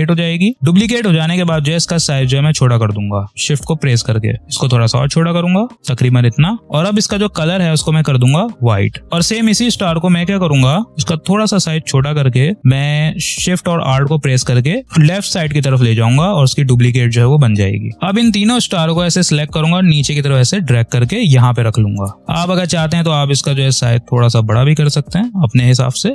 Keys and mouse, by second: 2.8-5.8 drag, 6.5 click, 7.3 v, 8.1-12.3 drag, 12.6-15.9 alt+shift+drag, 17.3-21.7 shift+drag, 22.1-26.1 alt+shift+drag.